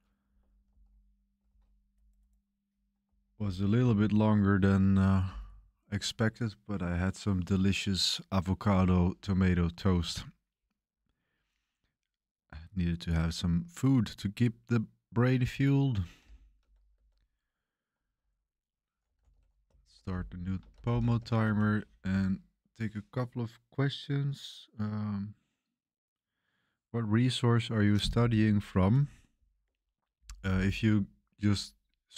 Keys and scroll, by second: 0.6 ctrl+l, 1.4 ctrl+c, 3.0 ctrl+c, 3.8 ctrl+l, 15.9-21.6 typing, 29.6 super+1, 29.8 super+1.